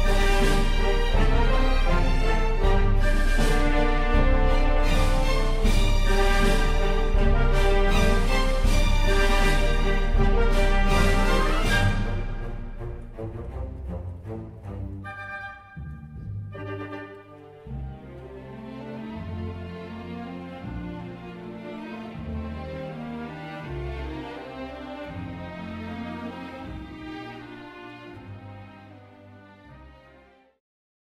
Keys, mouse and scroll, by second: 27.9 click.